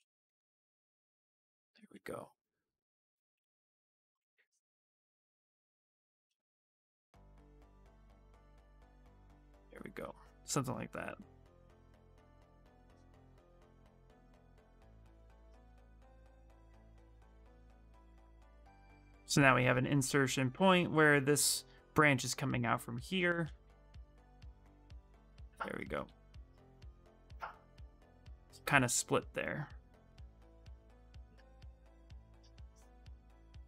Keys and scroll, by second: 6.5 ctrl+z, 6.8 ctrl+z, 7.3 ctrl+z, 7.5 ctrl+z, 22.6-23.9 typing.